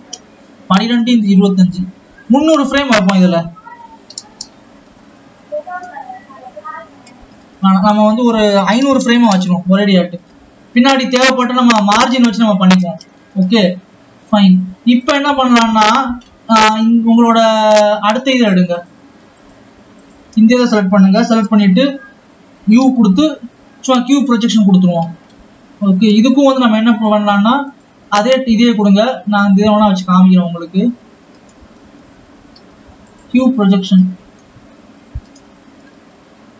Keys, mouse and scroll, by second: 12.9 scroll down 3, 13.8 scroll up 2, 15.5 click, 15.6 scroll up 2, 17.8 scroll down 2, 18.6 click, 19.2-19.7 drag, 21.0 Tab, 21.5 a, 24.1 u, 24.7-26.0 scroll down 5, 26.0 Tab, 27.8-28.1 drag, 28.1-30.1 scroll up 3, 30.1 click, 30.5-31.3 scroll up 6, 31.3 Tab, 32.1 a, 33.7 scroll down 3, 34.3 a, 35.8 alt+a.